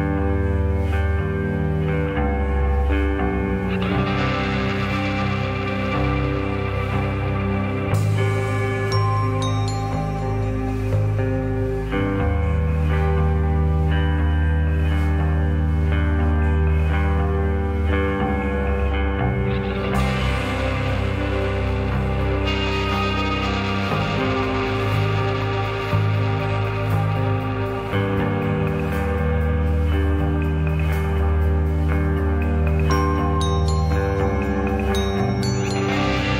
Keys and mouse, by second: 0.8-1.6 right drag, 2.6-3.3 right drag, 4.2 right click, 4.9 right click, 5.5 right click, 6.3 right click, 6.9 right click, 7.2-8.4 middle drag, 8.7 middle drag, 9.5 ctrl+z, 10.1 ctrl+z, 10.8 click, 11.6-12.0 shift+drag, 12.7-14.3 drag, 16.4 middle click, 20.3 click, 21.6 shift+click, 22.4 shift+click, 22.9-23.5 shift+drag, 33.0 shift+d.